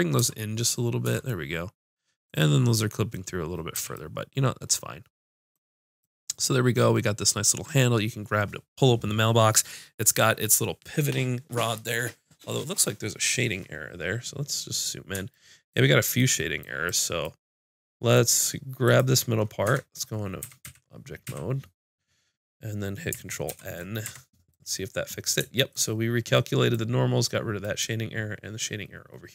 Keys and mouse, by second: 0.2 Tab, 1.0 Tab, 3.7 a, 10.5-14.7 middle drag, 14.8 middle click, 16.8 click, 19.6 Tab, 20.4 a, 20.6 a, 21.2 a, 23.4 ctrl+n, 24.0 Tab.